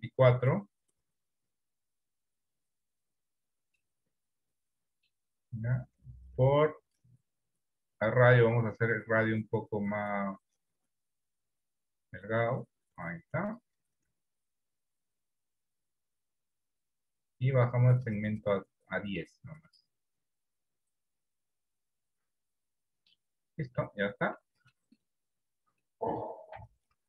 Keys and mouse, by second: 3.9-5.2 middle drag, 7.0-13.6 drag, 14.1-17.2 drag, 18.0 click, 18.3 click, 19.7 click, 24.5 middle click, 26.7 KP_1.